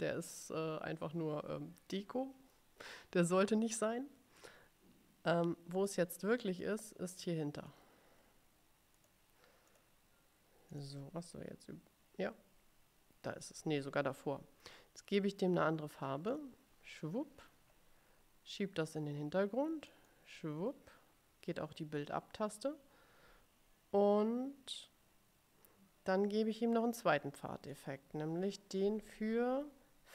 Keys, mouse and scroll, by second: 6.0 click, 6.7-8.0 drag, 9.1 click, 9.8 click, 10.8 click, 16.4 click, 20.0 click, 27.9 click.